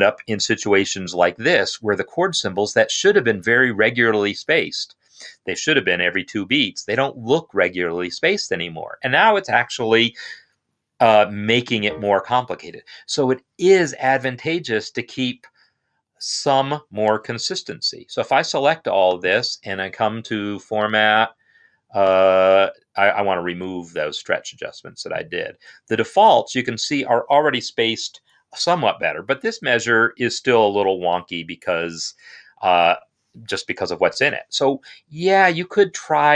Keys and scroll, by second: 17.1 ctrl+a.